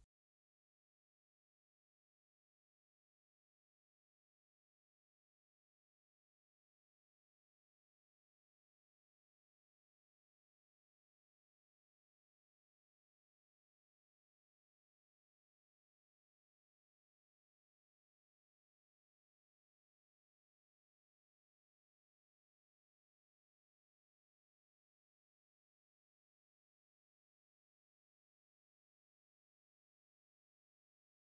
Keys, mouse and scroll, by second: 0.0 middle click, 1.1 shift+a, 1.7 s, 3.0 KP_Enter, 3.3 scroll down 1, 3.4 scroll up 1, 3.6 s, 5.3 KP_Enter, 5.5-6.1 scroll down 2, 5.7 alt+q, 6.2 alt+middle click, 6.4 scroll up 1, 6.6 alt+middle click, 7.1-7.9 scroll up 2, 7.2 F3, 7.5-8.6 middle drag, 7.9 F3, 8.0 scroll down 1, 8.1 alt+q, 8.6 click, 9.2 alt+q, 9.4 click, 9.5-9.9 scroll up 1, 9.9 alt+q, 10.2 click, 10.8 KP_7, 11.2-12.2 middle drag, 12.2 shift+a, 12.4-12.9 scroll down 1, 12.9 middle click, 13.1 s, 14.4 KP_Enter, 14.8 z, 15.2 alt+middle click, 15.4 alt+q, 15.6 alt+middle click, 15.8 alt+q, 16.0 alt+middle click, 16.8 g, 17.4 click, 18.7 alt+q, 19.2 KP_7, 19.6 click, 19.7 scroll up 1, 19.9 click, 21.2 F3, 21.5 click, 21.7 F3, 22.7 click, 23.4 middle click, 24.0 scroll up 1, 24.2 Tab, 24.4 scroll down 1, 24.7 2, 24.9 click, 25.3 g, 26.0 click, 26.1 scroll up 1, 26.5 g, 26.9 click, 27.0-29.2 middle drag, 27.4 ctrl+space, 28.5 ctrl+space, 29.2 click, 29.3-31.0 middle drag, 29.5 g, 30.7-31.0 scroll down 1, 31.0 click, 31.1-31.2 middle drag.